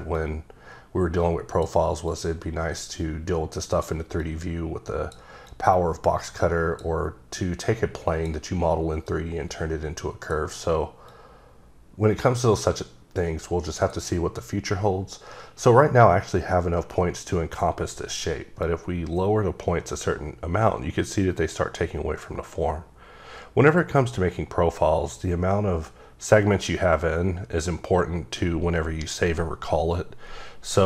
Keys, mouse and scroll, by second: 0.1 click, 2.1 click, 4.2 click, 5.5 click, 7.4 click, 9.1 click, 11.1 click, 18.6 click.